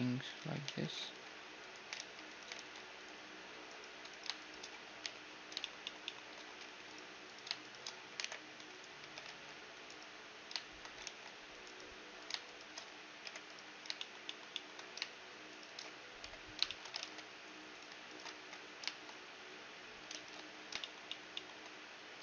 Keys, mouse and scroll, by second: 0.0 ctrl+z, 0.2 ctrl+z, 0.9 ctrl+r, 2.1 ctrl+r, 2.6-4.6 drag, 3.3-5.7 right drag, 4.6 j, 4.9-6.5 middle drag, 5.2 click, 7.8 alt+m, 8.4 right click, 8.6 a, 8.9 ctrl+r, 9.5-11.3 drag, 9.5-11.3 right drag, 9.8-11.8 middle drag, 10.6 ctrl+r, 11.8-19.7 right drag, 12.9 j, 13.6-16.6 drag, 15.8 j, 16.6 ctrl+Tab, 18.0 ctrl+x, 18.8-22.2 middle drag, 19.7 ctrl+z, 20.2 scroll down 1.